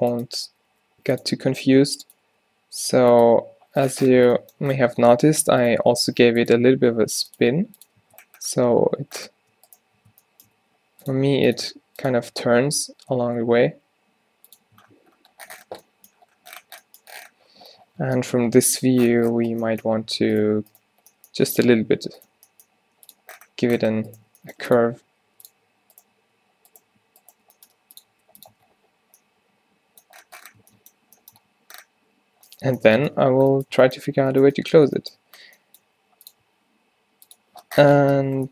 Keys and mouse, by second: 0.0-0.6 typing, 2.0 g, 2.4 e, 3.7 middle click, 6.0 r, 6.6 s, 7.4 g, 7.5 click, 8.1 Tab, 8.3 middle click, 9.1 Tab, 10.7 e, 11.2 r, 11.7 s, 12.4 r, 14.9 Tab, 18.1 Tab, 21.1 g, 22.5 g, 24.4 g, 25.0 r, 27.5 g, 28.2 r, 28.6 Tab, 30.7 Tab, 35.9 e, 36.5 s.